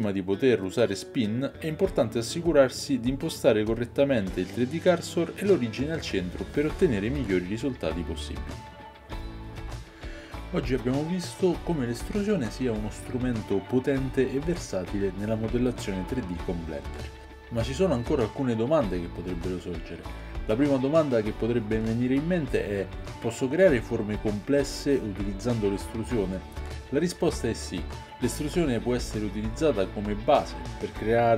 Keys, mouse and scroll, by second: 4.8 Tab, 5.6 a, 6.7-31.3 drag, 6.7-31.3 middle drag.